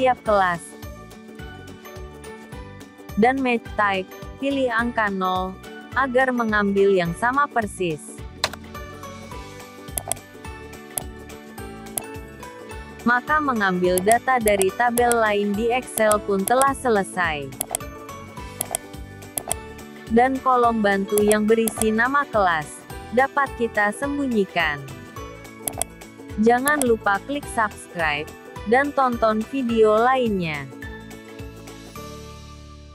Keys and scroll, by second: 0.9 F4.